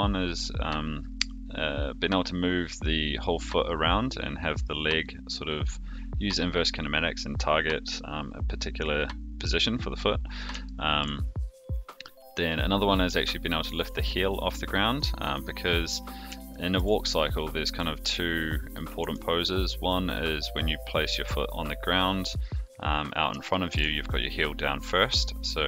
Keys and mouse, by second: 10.6-11.0 shift+middle drag, 16.5 shift+middle drag, 17.2 click, 19.0 r, 23.5 shift+middle drag.